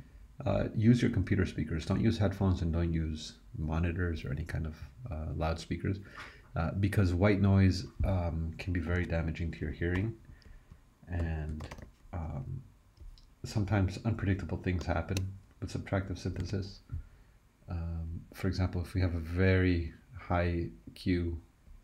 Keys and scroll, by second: 8.9 super+e, 9.9-12.2 typing, 16.4 super+e.